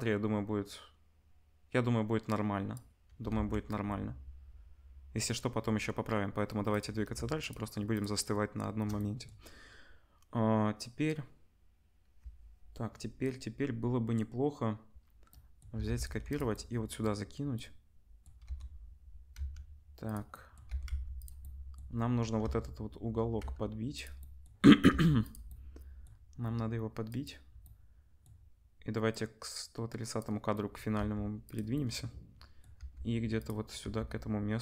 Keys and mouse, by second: 3.3 ctrl+s, 6.8-7.4 middle drag, 7.4 shift+click, 7.5-7.9 shift+middle drag, 7.9 shift+click, 8.0-27.0 shift+middle drag, 15.7 shift+d, 18.4 r, 20.6 r, 22.4 r, 24.8 g, 27.0-31.6 drag, 30.9 r, 31.6-34.6 middle drag, 32.7 g, 33.8 g.